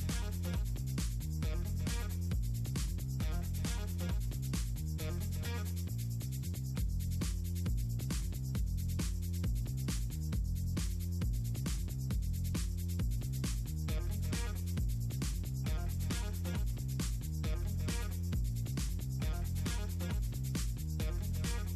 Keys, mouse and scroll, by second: 0.7 click, 1.0 middle click, 1.3 click, 1.7 click, 3.5 click, 4.9 click, 5.0 middle click, 6.7 click, 7.3 middle click, 7.5 click, 7.6 click, 8.3 click, 8.5 click, 8.8 ctrl+g, 9.0 click, 9.3 click, 10.4 click, 11.0 click, 11.8 middle click, 12.1 click, 12.3 click, 12.5 click, 13.1 click, 13.7 click, 14.4 middle click, 15.0 click, 15.7 middle click, 16.0 click, 16.5 click, 16.7-17.2 ctrl+scroll up 2, 17.2 click, 18.0 middle click, 18.5 click, 18.7 Delete, 18.7 click, 19.0 click, 19.3 click, 19.5 click, 19.8 click, 20.0 click, 20.7 middle click, 20.9 click, 21.3 click, 21.4 click.